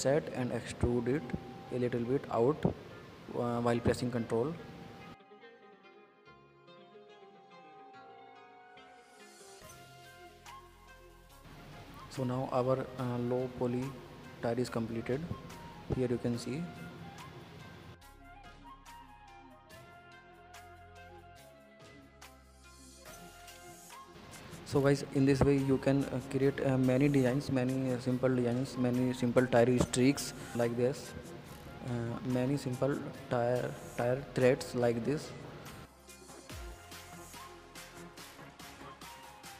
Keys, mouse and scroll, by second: 5.4 scroll down 4, 5.6 middle click, 6.0 Tab, 6.3 click, 6.5 scroll up 2, 6.7-8.0 middle drag, 8.0 scroll down 2, 8.1-8.8 middle drag, 8.8 scroll up 2, 9.0-12.4 middle drag, 12.4 click, 13.4 middle click, 13.6 scroll up 2, 13.8 middle click, 14.2 scroll down 3, 14.4-14.8 middle drag, 14.8 scroll up 2, 14.9-15.5 middle drag, 15.5 click, 15.6 scroll down 2, 15.7-16.4 middle drag, 16.4 scroll up 1, 16.5 middle click, 17.6 click, 18.3 click, 18.6-19.0 middle drag, 19.0-19.4 scroll up 1, 19.4-20.0 shift+middle drag, 20.0 scroll down 2, 20.1-20.8 middle drag, 20.8-21.8 drag, 21.8-23.5 middle drag, 23.5 click, 24.5 ctrl+z, 25.1 ctrl+z, 25.4-26.8 middle drag, 27.5 s, 28.8 middle click, 29.5 scroll down 2, 29.6 middle click, 30.1 Tab, 30.3 click, 30.4-30.8 middle drag, 30.8 scroll up 2, 30.9-31.3 middle drag, 31.3 scroll down 1, 31.4-32.5 middle drag, 32.5 scroll up 2, 32.8-35.0 middle drag, 35.5 click, 35.8 click, 36.0 middle click, 36.7 click, 36.9-38.5 middle drag, 38.9 click.